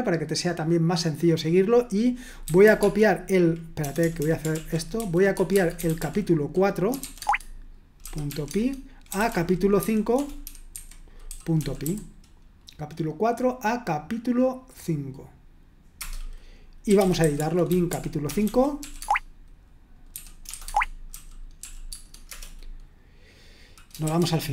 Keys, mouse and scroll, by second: 2.2-12.4 typing, 4.6 ctrl+l, 7.2 Tab, 16.0 Return, 16.6-18.8 typing, 19.0 Tab, 19.9-22.3 typing, 24.1-24.5 typing.